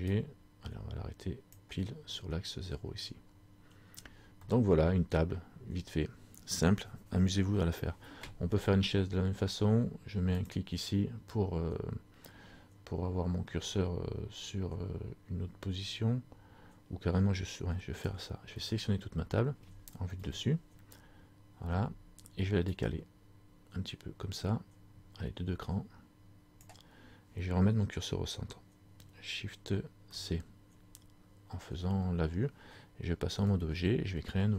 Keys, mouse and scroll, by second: 0.3 click, 4.0-4.3 scroll down 3, 4.7 middle click, 10.5 click, 12.5 middle click, 20.3 KP_7, 22.9 click, 30.3 shift+c, 33.6 Tab.